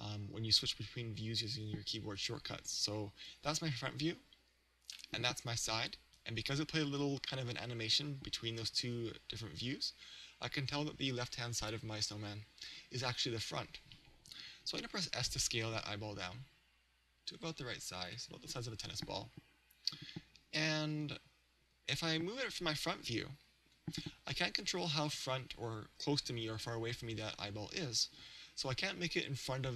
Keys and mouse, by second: 1.0 KP_1, 2.2 KP_3, 3.3 KP_1, 5.0 KP_3, 6.4 KP_1, 8.9 KP_3, 15.1 s, 18.2 click, 22.0 KP_1, 23.7 g.